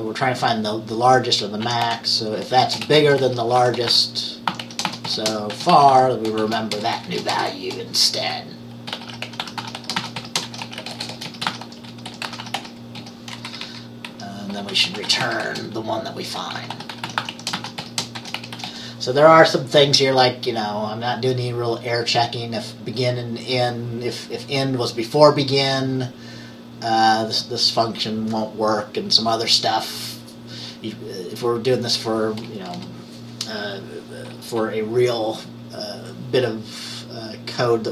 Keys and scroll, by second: 1.5-7.7 typing, 8.8-19.3 typing, 32.8 Return.